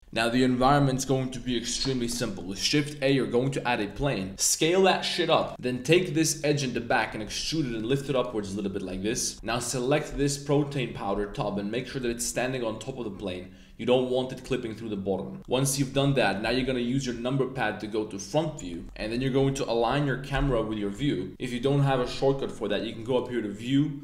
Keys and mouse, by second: 2.2 middle drag, 2.5 shift+a, 3.9 Tab, 4.3 s, 5.5-7.4 typing, 6.2 click, 8.4 Tab, 8.5 drag, 9.1 click, 9.3 super+z, 9.6 click, 11.3-11.7 drag, 11.8 g, 12.0 z, 15.4 click, 15.9 KP_1, 16.4 KP_3, 18.6 shift+middle click, 23.2-24.0 drag.